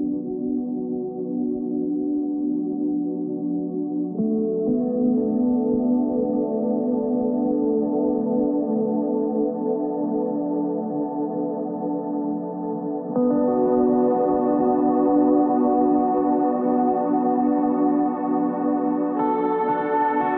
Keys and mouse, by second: 0.8 Tab, 2.5 ctrl+r, 4.9 ctrl+r, 6.2 ctrl+Tab, 7.8 ctrl+r, 9.7 ctrl+r, 12.0 ctrl+Tab, 18.2 i, 19.9 e.